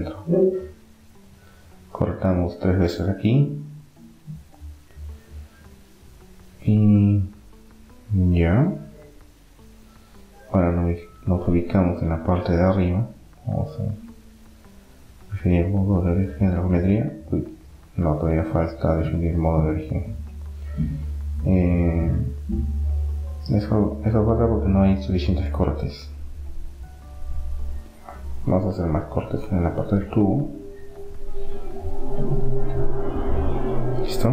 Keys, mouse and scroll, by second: 1.8 ctrl+r, 5.1-6.1 middle drag, 7.6-11.7 middle drag, 11.3-12.1 scroll up 1, 12.1-13.4 middle drag, 13.4-17.1 drag, 17.1-19.1 middle drag, 18.6-20.6 drag, 20.1 middle click, 20.6 middle click, 21.3 Tab, 22.5-23.8 middle drag, 23.6 ctrl+r.